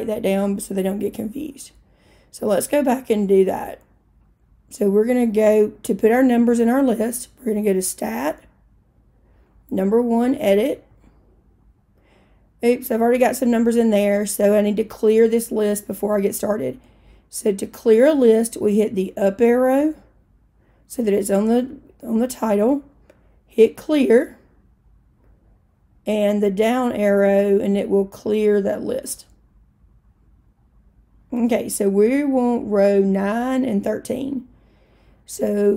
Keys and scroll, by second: 10.9 1, 19.5 Up, 23.5-24.3 typing, 26.7 Down.